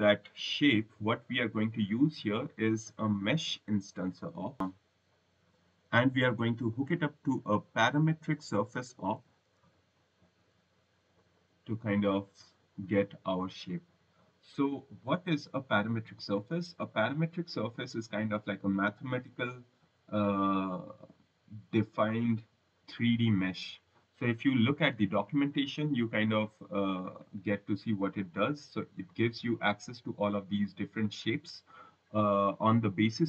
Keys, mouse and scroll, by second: 0.8 scroll, 1.8 right click, 3.1 click, 8.2-10.1 typing, 11.2 click, 12.5 click, 16.7-17.5 scroll, 18.0 scroll, 23.3 click, 32.7 click.